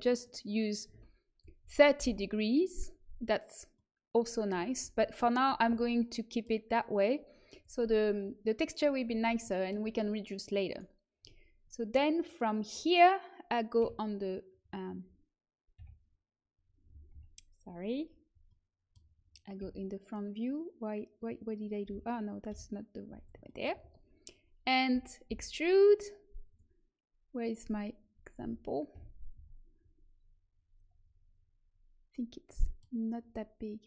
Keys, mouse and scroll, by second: 1.9 Delete, 4.7 ctrl+z, 5.6 a, 7.4-9.4 drag, 9.4-10.6 middle drag, 10.6-13.7 right drag, 17.0 Escape, 22.4 KP_7, 25.2 e, 27.5-29.3 drag, 28.9 KP_1, 29.3 z, 32.8-33.8 middle drag.